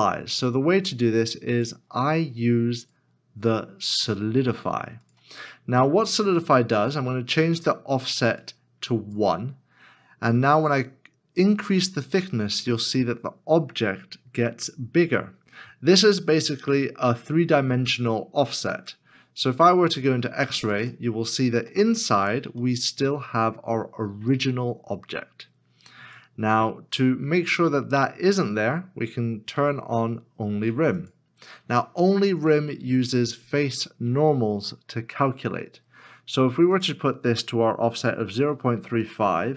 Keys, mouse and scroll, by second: 21.7 middle click, 22.8 shift+middle click, 38.5-39.5 typing.